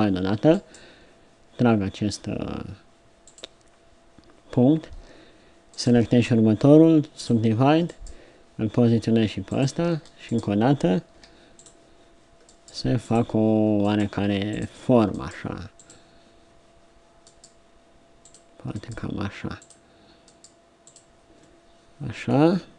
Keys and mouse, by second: 0.5-2.4 drag, 5.7-9.9 drag, 6.7 w, 10.3-11.7 drag, 11.2 w, 13.9 click, 17.4 click.